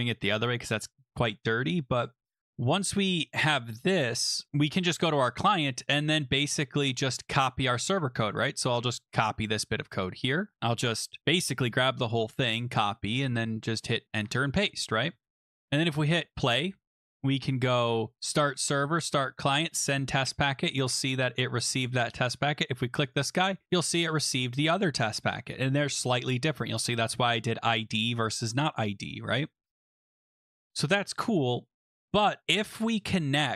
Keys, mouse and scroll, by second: 5.1 click, 6.5 click, 7.5 click, 8.2-9.6 scroll down 1, 10.5 click, 11.2 shift+click, 11.8 ctrl+c, 12.8 click, 13.7 click, 14.1 Return, 14.1 shift+click, 14.2 ctrl+v, 15.1 ctrl+s, 15.9 click, 17.6 click, 18.2 click, 19.0 click, 19.5 click, 21.2 click, 23.1 click, 30.5 click, 30.6 click, 31.7 click, 32.5 click, 33.1 alt+Tab, 33.2 click.